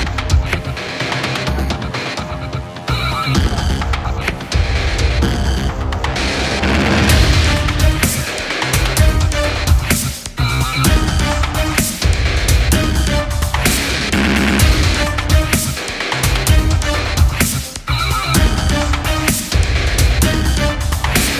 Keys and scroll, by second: 14.7 super+=, 17.1 super+z, 18.0 space.